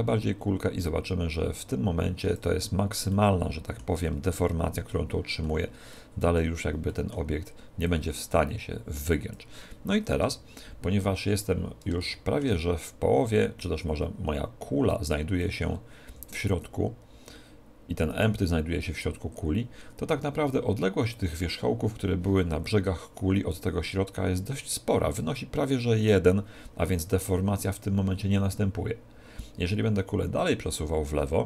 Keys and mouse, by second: 3.1-7.8 middle drag, 7.8 click, 10.1 KP_1, 12.0-13.8 middle drag, 13.2 click, 16.0-17.7 middle drag, 16.0 z, 18.1 right click, 30.4 click.